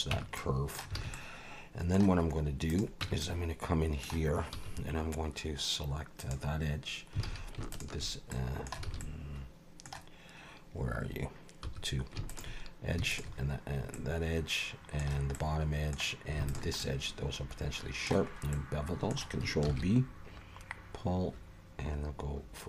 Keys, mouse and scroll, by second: 0.1 Tab, 0.4 middle click, 1.0 alt+a, 1.1 middle click, 2.3 scroll up 1, 2.7 click, 3.0 Tab, 3.2 middle click, 4.5 1, 6.2 click, 7.2 alt+a, 7.7 shift+click, 8.3 middle click, 8.8 alt+a, 9.0 middle click, 11.6 2, 12.3 alt+shift+click, 13.1 alt+shift+click, 13.9 middle click, 15.3 middle click, 16.5 alt+shift+click, 16.8 middle click, 18.3 scroll up 1, 18.5 middle click, 19.7 ctrl+b.